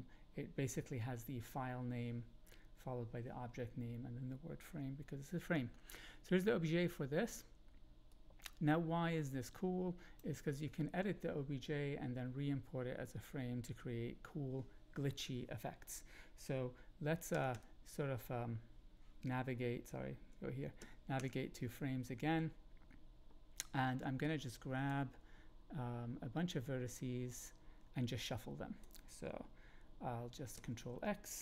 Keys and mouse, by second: 8.2-10.2 drag, 17.3 Right, 17.5 Right, 20.8 Right, 21.1 Right, 24.4 click, 27.3-29.1 drag, 30.5 ctrl+x.